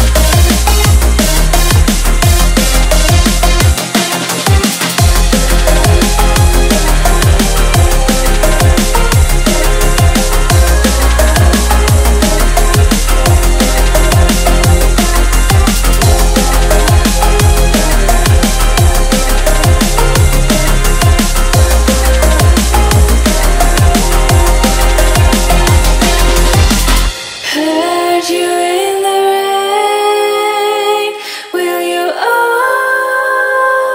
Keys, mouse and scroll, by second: 0.9 click, 1.1 e, 3.2 v, 3.8-4.9 drag, 4.9 e, 6.5 v, 7.5 r, 9.0 s, 9.7 click, 12.3 click, 12.5 s, 13.5 shift+middle click, 14.0 click, 14.4 e, 16.9 shift+click, 17.3-19.1 right drag, 19.1 ctrl+z, 19.6 ctrl+z, 19.7 ctrl+z, 20.0 ctrl+z, 20.7 shift+click, 20.9 right click, 21.7 click, 22.7 click, 23.1 r, 24.3 shift+middle click, 24.9 click, 25.2 e, 26.1 r, 26.9 click, 27.0 s, 28.0 shift+middle click, 28.3 click, 28.5 e, 30.4 v, 31.3 click, 31.4 click, 32.2 click, 32.6 e, 33.1 v.